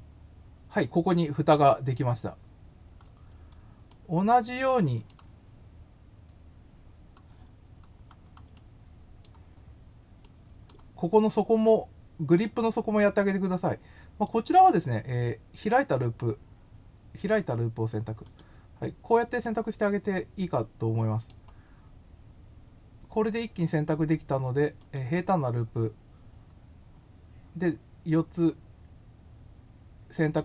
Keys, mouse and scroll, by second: 2.8-3.4 scroll up 4, 3.8-5.0 middle drag, 5.9 scroll down 1, 6.3 scroll up 1, 6.8 scroll down 1, 7.5-8.3 scroll down 3, 8.5 middle click, 9.5 scroll down 1, 10.2 middle click, 14.3 right click, 18.2 click, 19.4-21.2 middle drag, 24.7 click.